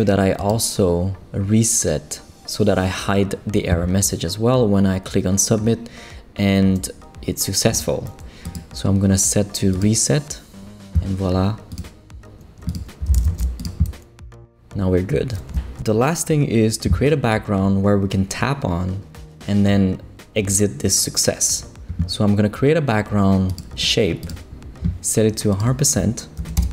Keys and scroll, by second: 12.8-13.8 typing, 26.4 shift+5, 26.6 shift+Return.